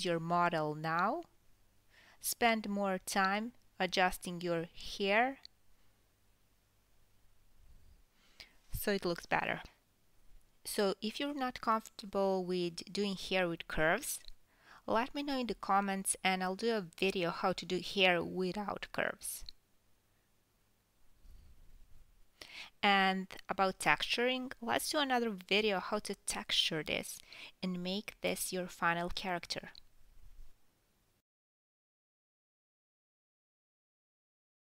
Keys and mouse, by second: 1.1 ctrl+click, 2.2 KP_1, 3.0 click, 3.2 Tab, 3.3 Tab, 3.3 click, 3.6 Tab, 3.9 KP_1, 4.0 KP_3, 4.2 g, 4.6 Tab, 4.8 click, 5.2 KP_Divide, 5.3 Tab, 5.4-10.3 typing, 5.9 Tab, 6.0 KP_Divide, 6.1 click, 6.1 middle click, 6.9 Tab, 7.2 Tab, 7.5 Tab, 8.1 Tab, 8.7-9.3 alt+s, 10.4 alt+s, 10.6 alt+s, 10.7 alt+s, 10.7 Tab, 11.2 Tab, 11.5-13.0 ctrl+middle drag, 11.6 ctrl+z, 11.8 Tab, 12.3 click, 12.4 Tab, 12.5-15.2 typing, 13.0 Tab, 13.3 ctrl+z, 14.9-17.5 middle drag, 15.6-16.1 alt+s, 17.1-26.1 typing, 17.6 click, 18.2 Tab, 19.3 Tab, 19.3 click, 19.3 middle click, 19.7 click, 19.7 middle click, 20.8 click, 20.8 middle click, 21.4-21.9 alt+s, 21.8 click, 21.8 middle click, 22.1 alt+s, 23.2-23.6 drag, 23.2-23.6 middle drag, 23.6 alt+s, 23.7 alt+s, 23.7 alt+s, 26.4 Tab, 26.4-28.6 middle drag, 26.6 click, 27.1 Tab, 27.2 alt+s, 27.3 alt+s, 27.4 alt+s, 27.4 KP_1, 27.6 g, 27.9 Tab, 28.6 Tab, 28.7 Tab, 29.5 Tab, 29.7 alt+s, 29.8 alt+s, 29.8 alt+s, 30.3 g, 30.6 click, 31.0 g, 31.5 Tab, 31.6 Tab, 32.2 g, 32.4 alt+s, 32.7 g, 33.0 alt+s, 33.0 alt+middle click, 33.2 alt+s, 33.3 Tab, 33.8 KP_1, 34.2 middle click.